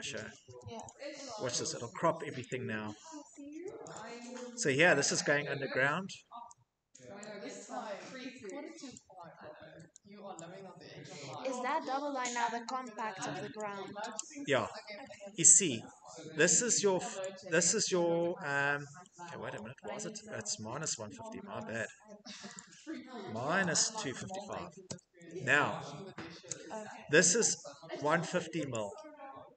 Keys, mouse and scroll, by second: 0.5 click, 2.2 click, 2.4 Escape, 2.4-2.8 scroll, 3.6 click, 4.1-4.4 scroll, 5.1 middle click, 5.4 middle click, 5.5 scroll, 6.9 click, 8.6 click, 10.0 click, 11.3 middle click, 13.2 click, 13.8-15.7 scroll, 15.1 Escape, 16.9 click, 17.7 Escape, 17.9 middle click, 17.9 middle click, 18.1 middle click, 18.7 middle click, 18.7-20.1 scroll, 20.1 Escape, 20.6 click, 22.2 click, 23.0-25.1 typing, 25.9 Escape, 26.1 Escape, 29.4 Escape.